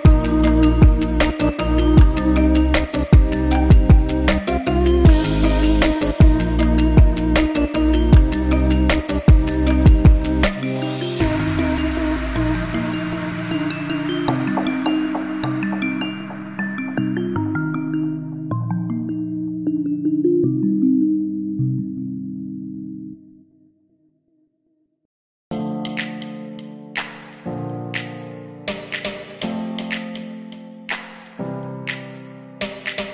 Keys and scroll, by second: 12.2 shift+m.